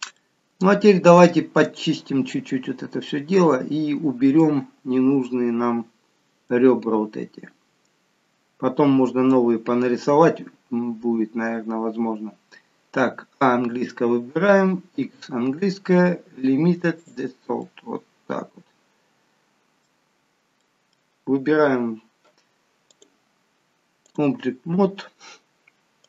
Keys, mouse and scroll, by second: 0.1 middle click, 1.4 scroll up 1, 2.3-3.1 scroll up 1, 3.1 middle click, 5.2 middle click, 13.3 a, 14.9 x, 17.5 middle click, 20.1-20.5 scroll down 2, 20.5 middle click, 22.9 click.